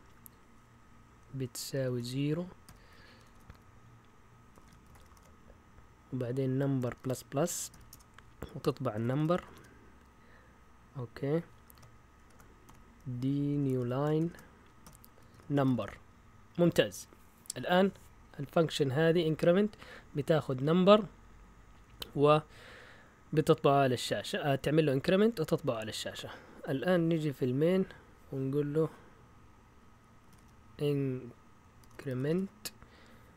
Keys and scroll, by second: 1.7-3.4 typing, 4.5-5.1 typing, 7.0-10.1 typing, 12.1-16.3 typing, 18.8 Up, 19.2 Up, 19.8 Down, 20.1 Up, 20.3 Up, 20.4 Up, 21.6 Down, 21.8 Down, 22.0 Down, 22.3 Down, 24.5 Up, 25.2-26.0 typing, 30.0-32.8 typing.